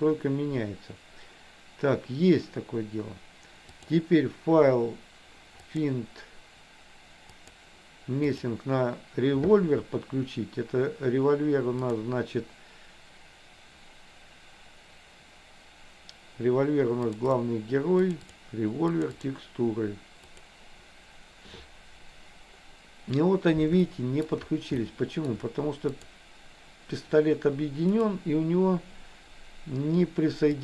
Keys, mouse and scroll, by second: 3.9-8.7 drag, 24.0 shift+middle click, 24.8 shift+middle click, 26.1 click.